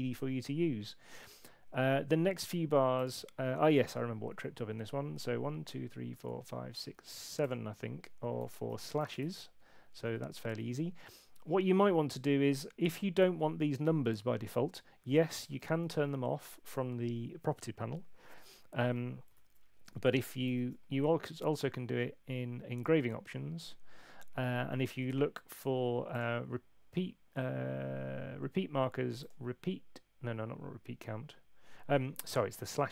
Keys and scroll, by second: 8.1-9.4 typing, 15.5 super+8, 19.3 super+8, 20.4 shift+super+e.